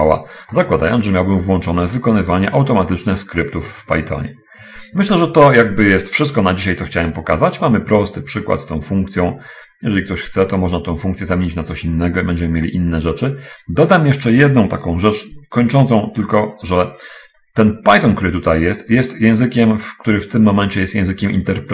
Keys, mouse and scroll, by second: 7.5 middle click, 8.4-11.1 drag, 20.5 click.